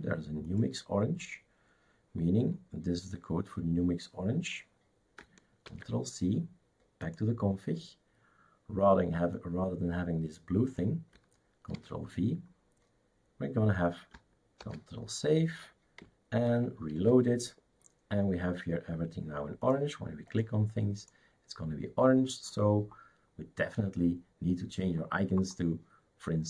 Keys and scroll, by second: 5.7 ctrl+c, 11.7 ctrl+v, 14.6 ctrl+s, 17.3 shift+super+r.